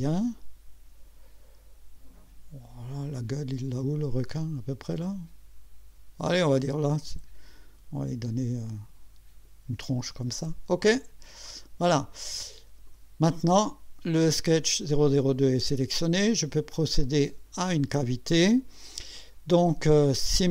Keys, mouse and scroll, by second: 11.4 click, 12.2-13.1 drag, 16.7 click.